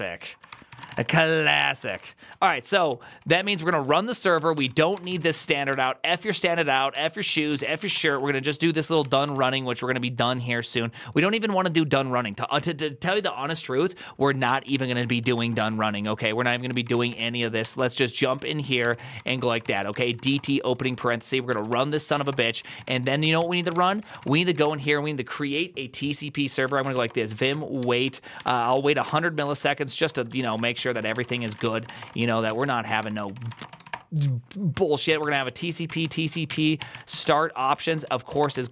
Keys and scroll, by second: 0.0-11.0 typing, 0.4 ctrl+d, 0.5 ctrl+c, 1.6 ctrl+c, 14.3-24.8 typing, 26.3-38.7 typing, 36.7 ctrl+n, 37.0 ctrl+y.